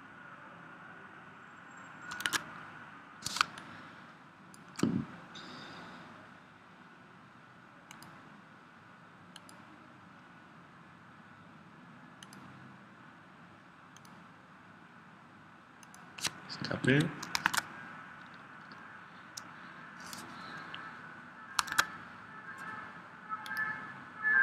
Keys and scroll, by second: 2.3 super+Tab, 3.4 space, 17.1 ⟲, 17.4 super+Tab, 21.8 super+Tab.